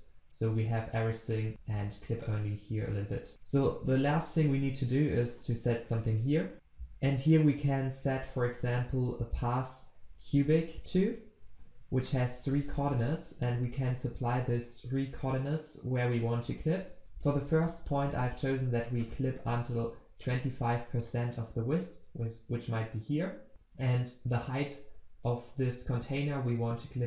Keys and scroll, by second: 10.9 Return, 12.0 Return.